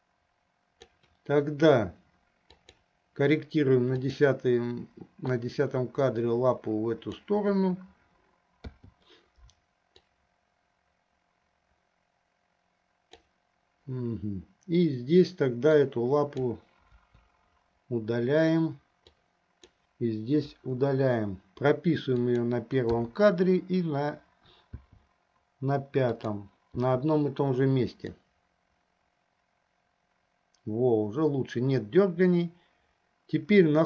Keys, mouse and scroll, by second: 2.8 click, 4.3 click, 5.7-7.7 drag, 10.4-13.5 drag, 15.8-16.6 drag, 17.1 Delete, 19.2-19.7 drag, 20.7 Delete, 22.4 click, 23.4 i, 25.0 i, 26.4 click, 27.1 i, 28.4-33.8 drag.